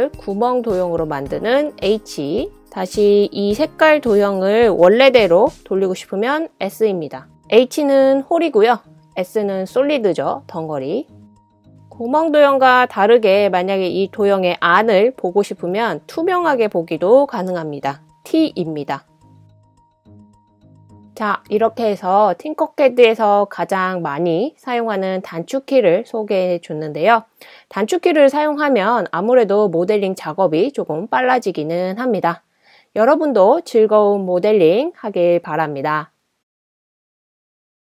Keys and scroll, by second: 0.0-0.9 typing, 3.0 s, 4.3-5.3 typing, 6.9 typing, 8.0 typing, 8.6 super+c, 8.8 super+v, 17.8-20.4 typing, 21.6 typing.